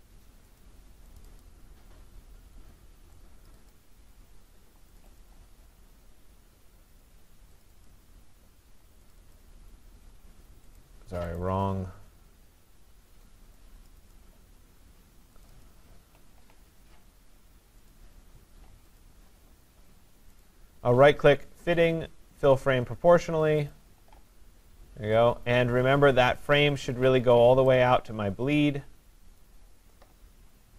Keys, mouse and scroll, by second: 0.6 middle click, 1.2 click, 2.8 click, 3.5 click, 3.7 click, 5.2 click, 7.7 click, 7.9 click, 9.2 click, 9.4 click, 10.8 click, 11.4 click, 13.9 click, 14.2 click, 15.5 click, 15.7 click, 17.9 click, 19.0 click, 20.4 right click, 23.7 click, 26.5 click, 29.4 click.